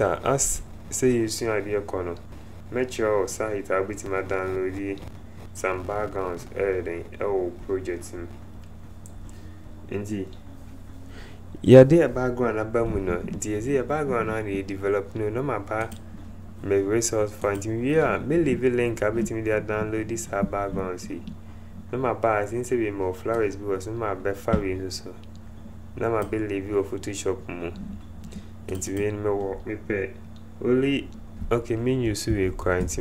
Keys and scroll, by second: 32.2 Delete.